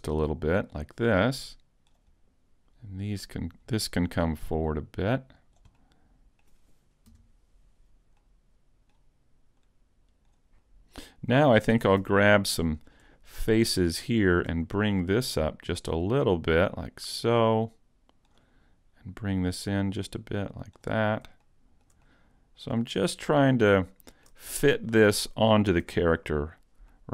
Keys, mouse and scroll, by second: 1.4 click, 2.5 right click, 2.7-3.3 scroll down 1, 3.3-3.9 scroll down 1, 4.3 click, 5.8 middle click, 7.1 KP_Decimal, 8.2 middle click, 9.6 click, 10.7 middle click, 10.7 scroll down 4, 11.9 ctrl+Tab, 12.8 right click, 13.4 shift+right click, 14.7 scroll down 1, 15.1 middle click, 16.8 click, 19.3 click, 21.5 shift+middle click, 22.1 middle click, 23.5 shift+middle click, 24.5 middle click, 25.3-25.6 scroll down 2, 25.9 a, 26.5 scroll down 1, 26.9 middle click.